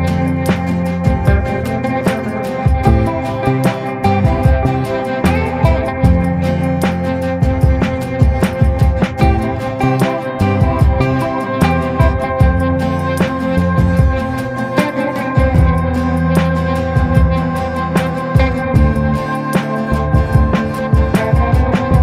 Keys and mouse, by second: 1.0 middle click, 1.5 shift+middle click, 2.1 ctrl+i, 2.6 b, 4.1 right click, 6.0 ctrl+z, 7.0 a, 8.0 ctrl+i, 8.7 b, 9.6 b, 11.0 b, 12.0 b, 12.7 b, 13.7 b, 14.8 b, 16.1-17.6 middle drag, 18.2 ctrl+z, 18.8 a, 19.6-21.1 middle drag, 21.2-22.0 middle drag.